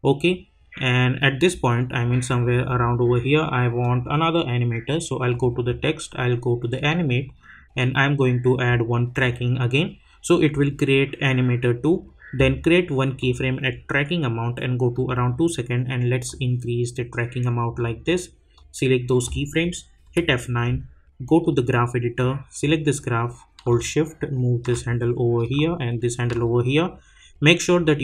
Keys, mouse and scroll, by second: 1.2-3.8 drag, 9.3 click, 12.4-20.0 drag, 20.0 F9, 21.4-27.6 drag, 25.9-26.7 shift+drag, 27.6 right click.